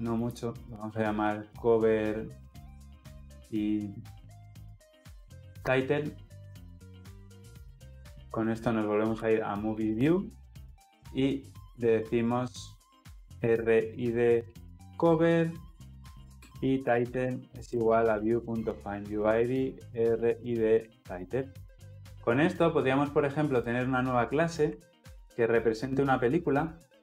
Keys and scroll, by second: 26.8 alt+Insert.